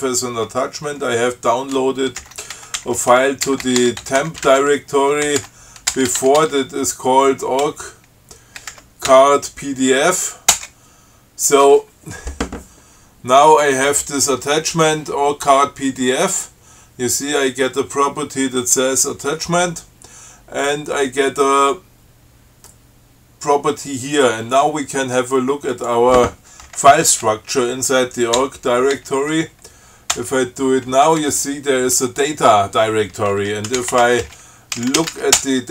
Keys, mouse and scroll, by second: 2.2-6.4 typing, 6.6 Tab, 7.9 c, 8.9 BackSpace, 9.0 g, 9.4 Tab, 10.8 Return, 26.0 click, 28.6 l, 29.2 s, 30.4 Return, 33.7-35.7 typing.